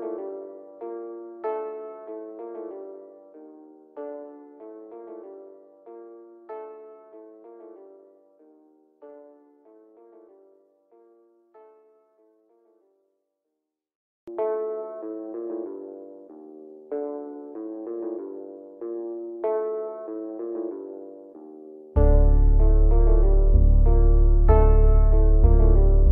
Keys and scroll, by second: 12.0 F3, 12.6 Escape, 17.6 g.